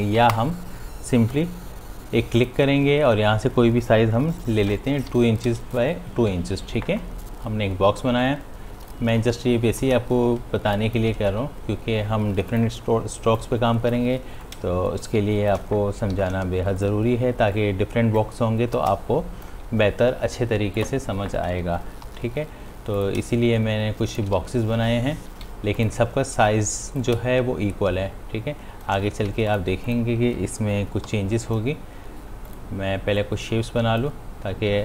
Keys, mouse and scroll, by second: 2.6 click, 4.9 Tab, 6.3 v, 8.0-9.8 drag, 9.8-11.6 alt+drag, 11.6 ctrl+d, 12.6-16.2 drag, 16.2 ctrl+d, 17.2-21.7 drag, 22.9 p, 23.2 click, 24.4 v, 25.8-29.4 drag, 29.4 ctrl+shift+d, 29.8 click, 31.6 p, 32.5-34.8 drag.